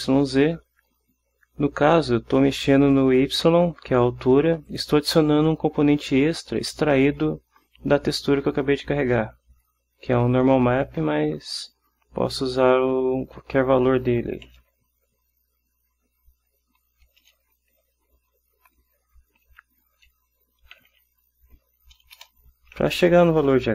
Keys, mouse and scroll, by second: 2.7 click, 4.8 click, 12.6 click, 14.6 Delete, 14.8 x, 17.4 BackSpace, 17.9 y, 19.6 End, 20.1 Home, 20.9 /, 21.7 End, 22.3 Return.